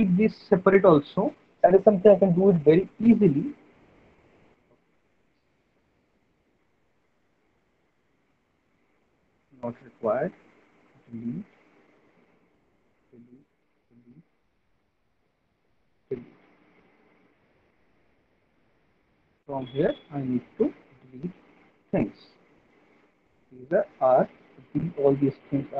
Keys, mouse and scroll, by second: 6.1 alt+middle click, 6.5 middle click, 6.6 middle click, 8.1 alt+middle click, 9.1 click, 10.2 Delete, 10.8 click, 11.1 Delete, 12.8 Delete, 13.4 click, 13.8 Delete, 15.6 click, 16.1 Delete, 17.5 alt+middle click, 18.1 middle click, 20.4 alt+middle click, 20.8 middle click, 21.4 alt+middle click, 23.1 click, 24.1 Delete, 25.3 click.